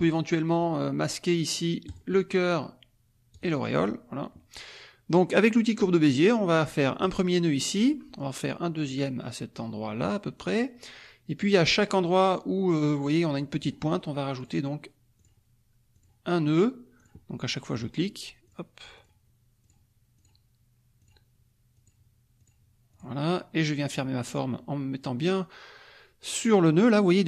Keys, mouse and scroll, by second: 1.9 click, 3.4 click, 7.0 click, 10.4 click, 13.6 click, 14.3 click, 15.1 click, 15.9 click, 16.5 click, 16.9 click, 17.7 click, 18.4 click, 18.9 click, 19.6 click, 20.1 click, 20.9 click, 21.7 click, 22.3 click, 22.9 click.